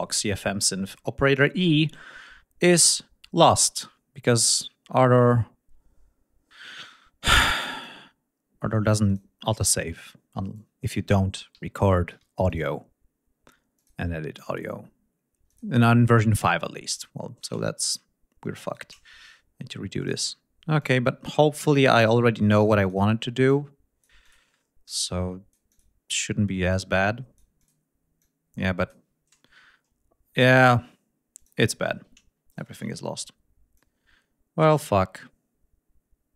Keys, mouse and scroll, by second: 1.0-1.8 scroll down 4, 7.7 click, 9.1 click, 9.4 scroll down 2, 10.5 click, 11.7 ctrl+scroll up 2, 12.1 ctrl+d, 12.5 ctrl+click, 13.8 click, 15.5 click, 17.8 shift+right click, 18.6 shift+right click, 20.0 click, 20.4 ctrl+scroll up 2, 20.8 ctrl+click, 22.1 click, 23.5 click, 25.0 click, 26.7 click, 28.2 click, 31.4 click, 32.5 shift+right click, 33.8-36.3 drag.